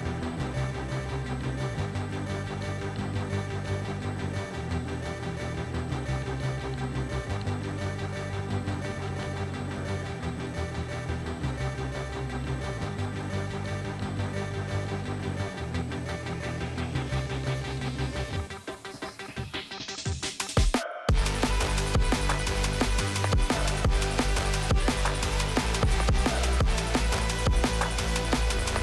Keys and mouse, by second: 0.0 r, 2.0 z, 2.1 z, 3.1-4.8 drag, 4.7 KP_0, 7.7 middle drag, 8.3 ctrl+s, 9.0 click, 10.2 shift+d, 11.8 r, 14.3 s, 15.5 s, 15.6 s, 16.3 ctrl+z, 16.7 s, 17.4 s, 17.5 s, 18.1 g, 22.2 z, 23.0 ctrl+s, 25.5 click, 26.2 click, 27.1 ctrl+click, 27.4 ctrl+s.